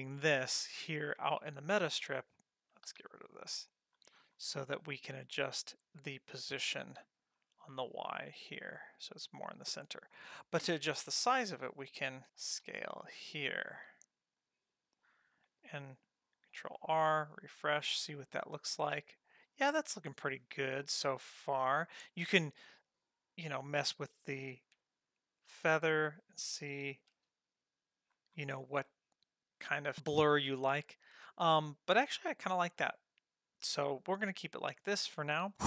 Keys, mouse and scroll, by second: 2.9 n, 3.9-4.2 scroll down 2, 4.2 scroll up 1, 4.3-5.3 scroll down 6, 5.3-6.4 scroll up 1, 6.4-6.7 scroll up 1, 6.7 g, 12.3 s, 16.7 ctrl+r, 17.5-18.8 scroll up 7, 18.8-21.9 scroll up 3, 24.6 alt+s, 27.1 ctrl+r, 28.1-29.0 scroll down 7, 30.3-32.2 scroll up 5, 32.2 scroll down 1, 32.4-32.8 scroll down 3, 32.7 scroll up 1.